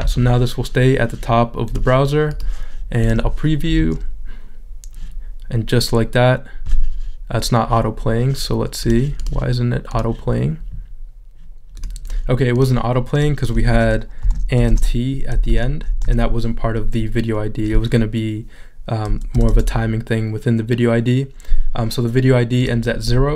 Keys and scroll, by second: 16.2 t, 19.3 BackSpace.